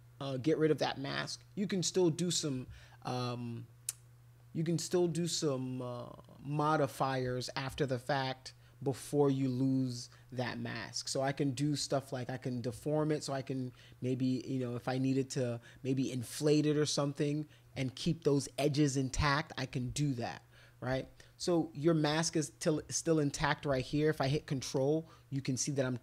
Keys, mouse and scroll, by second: 2.0 ctrl+click, 5.1-6.7 drag, 11.9 click, 14.9-18.9 drag, 19.0 click, 19.9 ctrl+z, 20.9 ctrl+z, 24.7 ctrl+click, 25.3 ctrl+click, 25.8 ctrl+click.